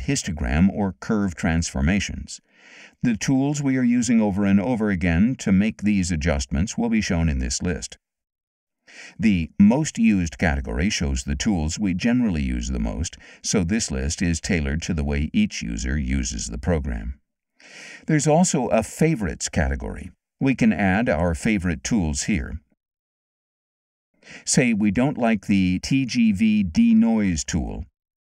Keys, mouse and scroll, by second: 9.7 click, 20.4 click, 22.1 click.